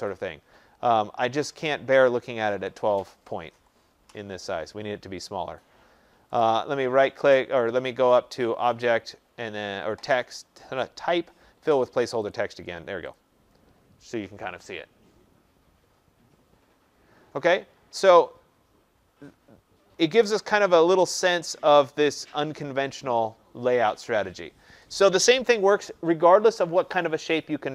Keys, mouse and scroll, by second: 0.0 click, 2.6 click, 3.5-4.0 typing, 6.3 right click, 8.8 click, 12.3 click, 13.1 click.